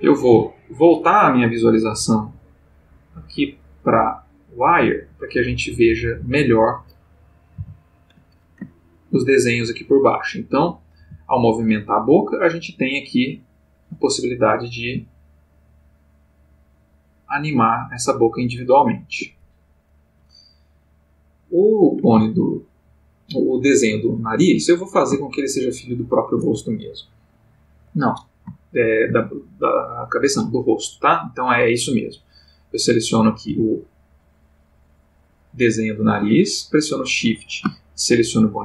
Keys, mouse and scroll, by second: 0.1 click, 2.1 click, 3.0 click, 4.7 click, 6.4 click, 7.6 alt+g, 8.7-9.2 ctrl+alt+middle drag, 11.0 g, 19.1 Escape, 21.2 click, 22.0 g, 24.5 Escape, 25.4 shift+click, 28.7-29.2 shift+middle drag, 31.5 click, 32.3 click, 33.0 click, 33.5 g, 36.0 Escape, 38.4 shift+click.